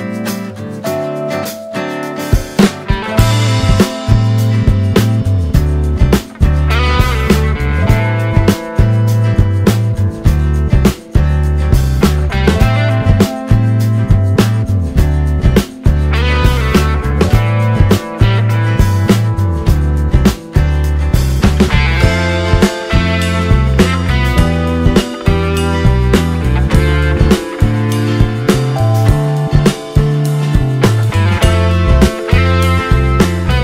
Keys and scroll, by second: 4.4 c, 4.7 c, 5.0 c, 8.8 space, 14.9 ctrl+v, 18.8 c, 18.8 c, 19.8 space, 21.2 ctrl+v, 25.0 7, 25.7 2, 29.2 ctrl+space.